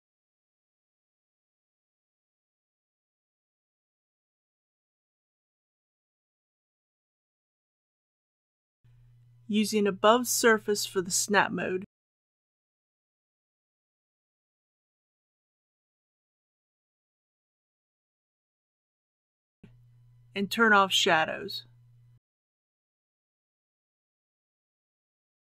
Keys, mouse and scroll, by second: 21.1-21.4 scroll down 1, 23.6 click.